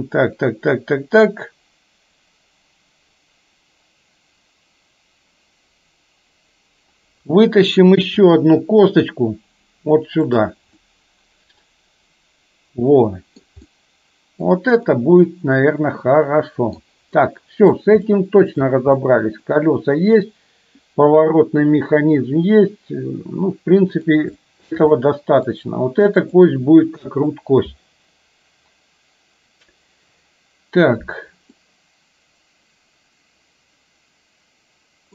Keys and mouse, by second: 8.2 e, 10.8-13.4 middle drag, 13.7 middle click, 15.0-16.8 middle drag, 17.2 middle click, 18.2 shift+middle click, 19.0 middle click, 21.8-24.2 middle drag, 24.4 shift+middle click, 25.0 middle click, 26.4 click, 31.5-35.1 middle drag.